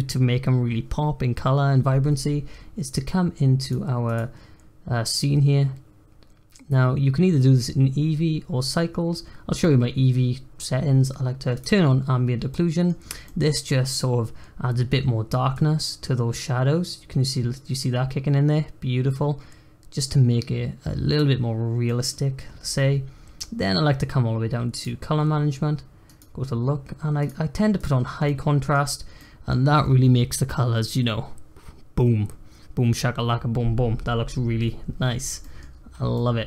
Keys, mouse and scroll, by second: 3.6 click, 4.0 click, 9.5-11.9 drag, 12.5-13.1 middle drag, 13.1 scroll up 1, 13.2-15.5 middle drag, 15.5-18.5 drag, 21.6 scroll down 1, 21.9-22.7 middle drag, 22.7-24.1 scroll down 1, 24.1-24.7 scroll down 2, 24.7-25.1 drag, 25.1-26.1 scroll down 2, 26.1-27.8 drag, 28.0 scroll down 1, 28.2-28.7 middle drag, 28.7-29.2 scroll up 2, 29.2 middle click, 29.5-32.6 scroll up 1, 35.4 middle drag, 35.6-36.1 scroll down 1, 36.1-36.4 middle drag.